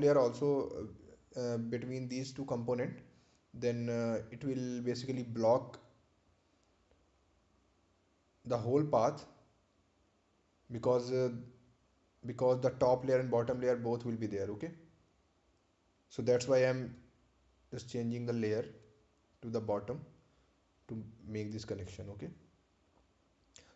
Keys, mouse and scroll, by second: 8.9 click, 16.2 click, 19.2-19.7 scroll down 1, 20.8 right click, 22.1 ctrl+click.